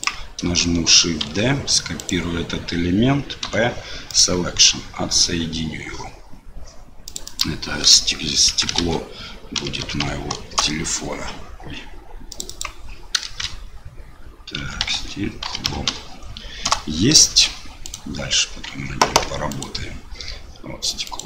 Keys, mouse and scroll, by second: 1.2 shift+d, 3.4 p, 7.0 click, 7.2-11.3 drag, 12.3-17.3 drag, 17.9 click, 19.1 Tab, 19.5 click, 21.0 click.